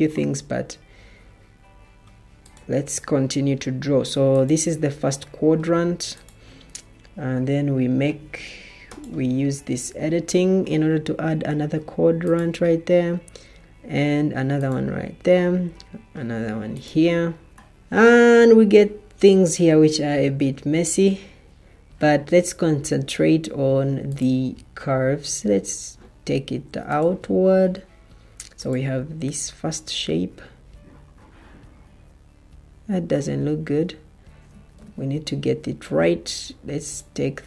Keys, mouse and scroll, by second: 34.7 ctrl+z.